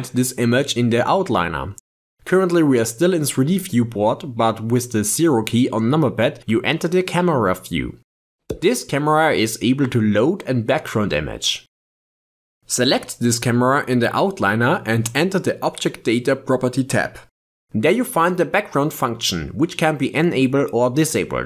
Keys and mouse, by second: 2.3 click, 2.6-5.3 middle drag, 5.3 KP_0, 8.4 ctrl+Tab, 10.7 click, 11.7 click, 15.1 click, 19.7 click, 20.5 click.